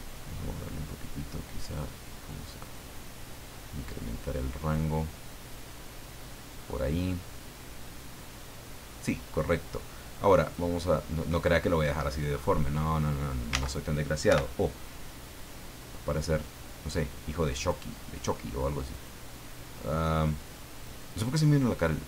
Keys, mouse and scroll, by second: 1.0-2.0 scroll down 3, 2.6 scroll down 2, 5.0-7.1 middle drag, 7.3-9.0 middle drag, 9.3 scroll up 2, 10.4 click, 11.3 right click, 12.5 click, 13.6 ctrl+z, 14.3 o, 15.1-17.9 drag, 17.9 middle click, 18.9 right click, 19.8 middle click, 20.8 right click, 21.4-22.0 middle drag.